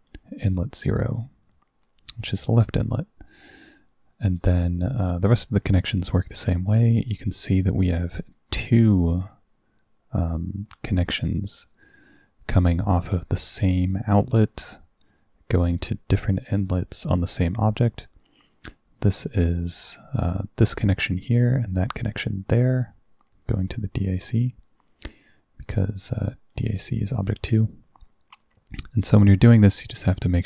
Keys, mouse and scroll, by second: 4.3 click, 8.1 click, 9.4-10.8 drag, 13.4 click, 14.3 click, 15.6 click, 25.8 click, 27.3 click, 29.8-30.4 drag.